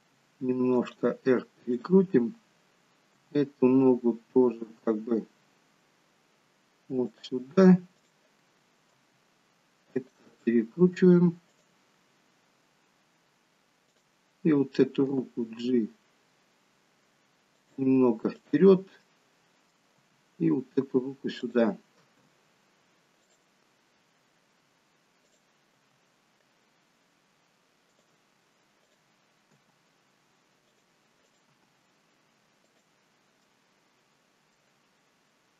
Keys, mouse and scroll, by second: 0.0 r, 1.7 click, 3.1 g, 8.0 click, 8.9 r, 11.5 click, 13.9 click, 15.1 g, 18.4 click, 19.1 middle click, 20.0 g, 22.0 r, 25.2 click, 25.8 r, 28.8 click, 29.5 g, 31.2 click, 31.6 g, 33.5 middle click.